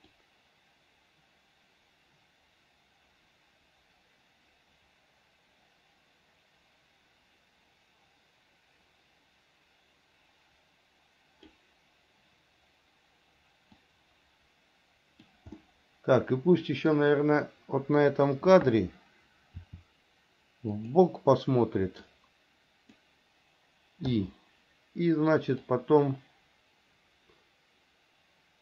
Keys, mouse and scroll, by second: 0.4-11.7 drag, 14.3-15.5 drag, 15.8-17.1 middle drag, 19.8 r, 22.4 click, 25.9-28.6 drag.